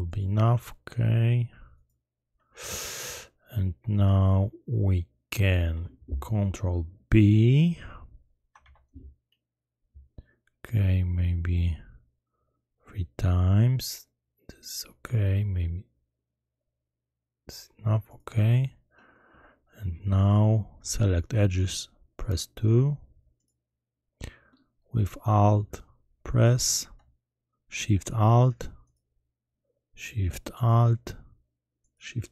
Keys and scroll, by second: 8.6 ctrl+b.